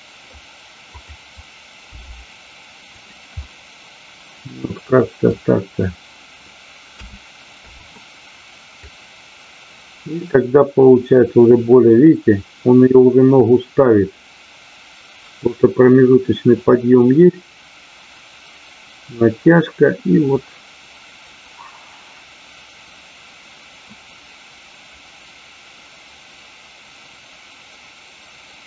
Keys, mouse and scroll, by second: 0.9 click, 2.8 click, 3.4 scroll up 1, 3.5-5.3 middle drag, 5.3 scroll down 1, 8.8-28.6 drag.